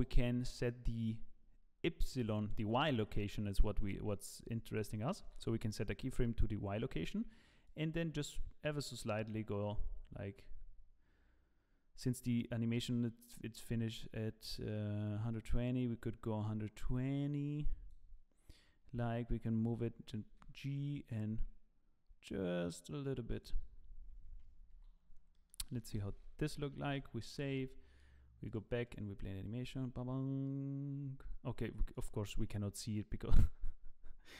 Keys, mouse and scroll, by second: 2.9 middle click, 5.2 i, 7.7 click, 20.3 g, 24.7 i, 25.3 middle click, 25.9 KP_0, 26.9 ctrl+s, 28.4 click, 28.8 click, 31.9 click, 32.9 click.